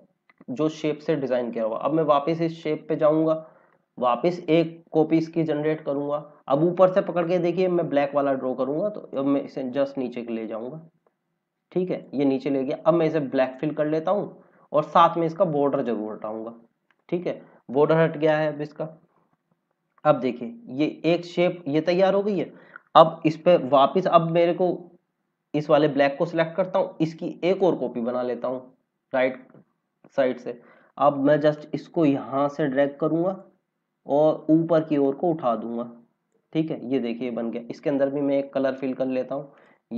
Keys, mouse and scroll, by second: 2.1 click, 4.5 click, 6.5 click, 15.7 right click, 16.8 click, 19.6 scroll up 1, 21.5 scroll down 1, 22.2 click, 25.1-26.9 scroll up 1, 27.4 click, 31.5 click, 33.8-35.0 scroll up 1, 35.0 click, 39.5 click.